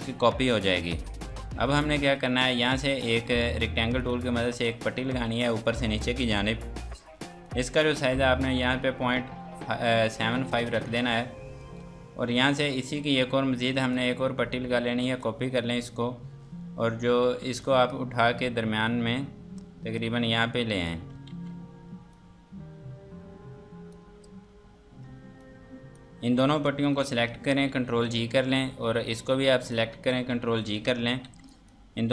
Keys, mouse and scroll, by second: 4.0 click, 9.2 KP_Decimal, 9.6 KP_7, 10.8 KP_Enter, 12.2 F2, 12.4 click, 15.0 ctrl+right click, 15.8 scroll down 1, 17.4 F2, 17.6 click, 22.1 click, 24.5-24.9 scroll down 1, 25.4 click, 27.7 ctrl+g, 28.5-29.1 scroll down 1, 29.1 click, 30.6 ctrl+g, 31.5 click.